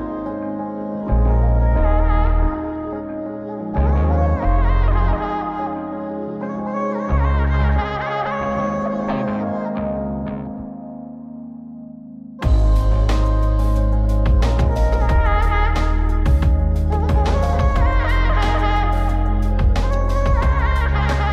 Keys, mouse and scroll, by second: 2.6 click, 4.8-6.0 drag, 7.7 click, 9.5 scroll up 2, 10.5 KP_7, 11.6-12.2 scroll down 1, 12.3 shift+middle click, 13.6 middle click, 14.8 click, 15.4 scroll down 2, 15.6 middle click, 16.1 click, 16.7 click, 17.3 middle click, 17.8 click, 18.1 scroll up 2, 18.4 middle click, 19.0 click, 19.8 click.